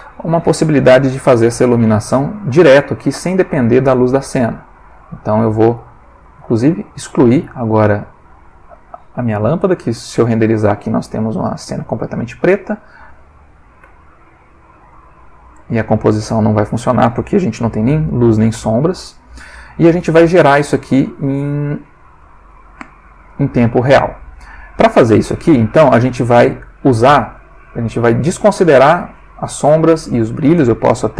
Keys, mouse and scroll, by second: 2.1 click, 4.8 click, 5.8-6.4 ctrl+middle drag, 6.7 ctrl+x, 7.0 ctrl+click, 7.7-8.6 ctrl+middle drag, 9.6 F12, 13.4 click, 13.8 Escape, 14.9 click, 15.4 click, 19.1-19.7 ctrl+middle drag, 20.1 click, 22.3 middle click, 23.3 click, 24.3 click, 27.4 click, 29.0 click, 30.3 click.